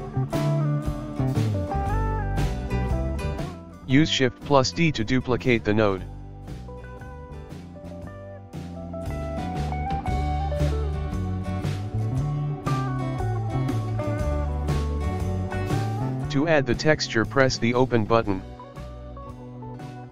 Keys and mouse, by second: 1.7-3.4 drag, 3.4 shift+d, 4.6-6.4 shift+middle drag, 6.4-8.1 drag, 8.1-15.2 shift+middle drag.